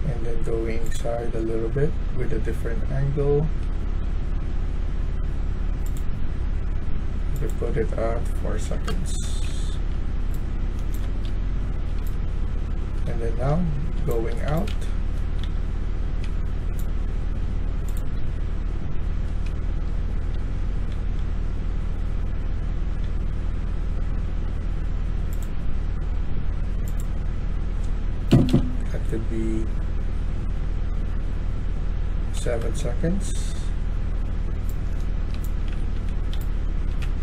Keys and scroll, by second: 1.6-4.2 typing, 8.6-16.0 typing, 8.8 Return, 18.1-19.4 typing, 20.4-21.1 typing, 22.8 w, 28.2 BackSpace, 28.4 BackSpace, 32.2 7, 32.6 Return, 34.1-36.9 typing.